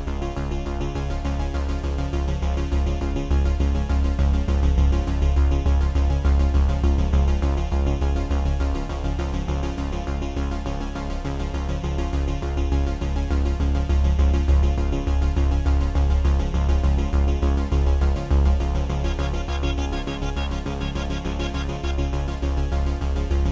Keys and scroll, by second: 14.0 F9.